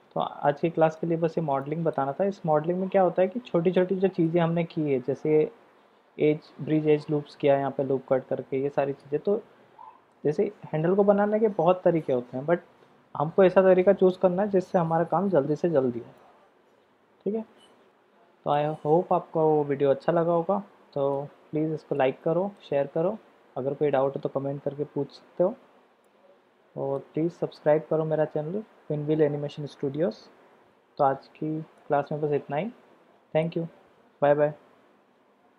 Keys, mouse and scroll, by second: 0.4 middle click, 1.6-2.0 shift+middle drag, 3.8-4.3 middle drag, 9.0-10.2 middle drag, 16.2-18.6 middle drag, 20.2-21.2 middle drag, 21.9-22.6 middle drag, 26.0-27.1 middle drag, 31.8-33.6 middle drag.